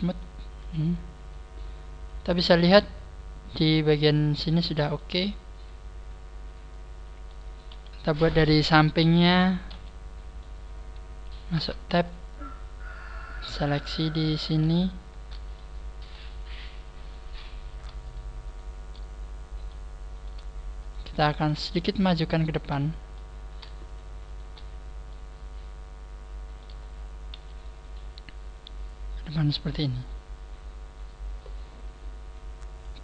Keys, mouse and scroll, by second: 0.0 click, 0.1 click, 0.6 t, 3.6 click, 4.9 middle click, 7.6 KP_1, 8.6 right click, 9.6 `, 11.5 Tab, 12.0-12.7 scroll up 2, 12.8 scroll up 3, 13.4 right click, 13.4 scroll up 4, 14.2 shift+right click, 15.5 middle click, 16.4 shift+right click, 17.5 shift+right click, 18.0 shift+right click, 19.8 shift+right click, 19.8 middle click, 20.8 shift+right click, 21.2 shift+middle click, 21.6 shift+middle click, 22.4 shift+right click, 22.7 shift+middle click, 23.3 scroll up 2, 23.8 shift+right click, 23.8 scroll up 1, 24.3 shift+right click, 24.6-25.0 scroll down 4, 25.0 middle click, 27.0 scroll down 1, 27.2 KP_1, 29.1 click.